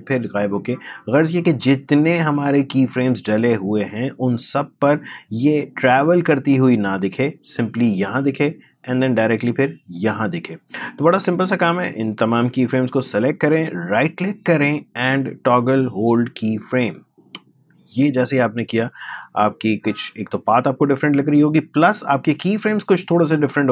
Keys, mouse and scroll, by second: 5.7-11.6 drag, 14.3 right click, 17.3 click.